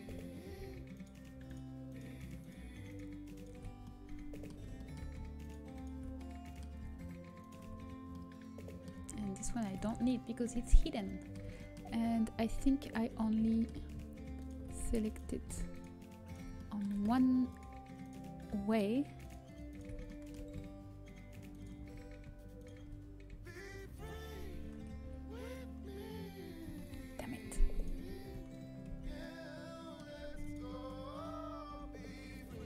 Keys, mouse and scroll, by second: 3.8 middle click, 10.3-11.5 middle drag, 24.9 Delete, 26.7 ctrl+z, 29.5 c, 31.3-32.3 drag, 31.6 Delete.